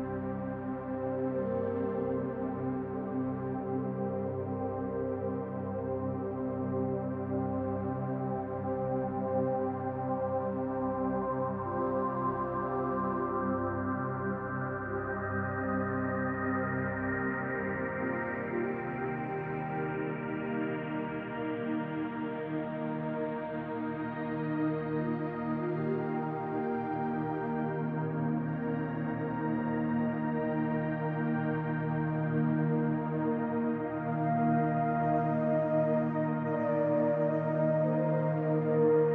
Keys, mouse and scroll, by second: 0.3 middle click, 2.7 middle click, 2.7-3.1 scroll up 4, 3.3 shift+middle click, 3.4 shift+middle click, 3.9 middle click, 7.4-8.7 scroll down 2, 7.9 middle click, 10.7 scroll down 2, 12.0 click, 13.1 middle click, 16.1 click, 16.6 middle click, 18.5 middle click, 19.0 scroll down 3, 19.2 middle click, 23.3-24.9 scroll up 10, 24.9 click, 25.6 middle click, 26.7 Tab, 27.2-27.5 scroll up 1, 27.5 middle click, 30.6 click, 31.4 middle click, 31.9 b, 37.4-38.8 scroll up 1, 38.8-39.1 scroll up 1, 38.8 b.